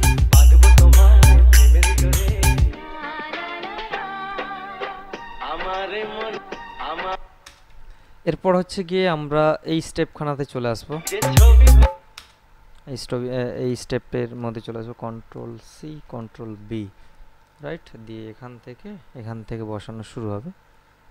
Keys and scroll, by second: 7.3 space, 11.3 space, 15.5 ctrl+c, 16.4 ctrl+b, 18.7 Right.